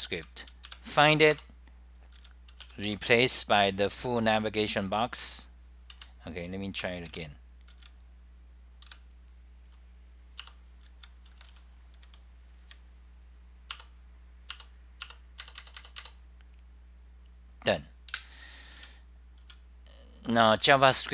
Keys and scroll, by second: 0.4 Home, 0.8 k, 1.4 Return, 2.2 Home, 5.6-6.3 typing, 7.2 F10, 7.7 Home, 8.5-9.2 typing, 10.6 Return, 11.0 Home, 11.6-14.5 typing, 13.9 Return, 14.5 F10, 14.5 Home, 14.5 Return, 14.5 Delete, 14.5 ctrl+g, 15.1 Return, 18.1 super+w, 18.9 w, 20.1-21.1 typing.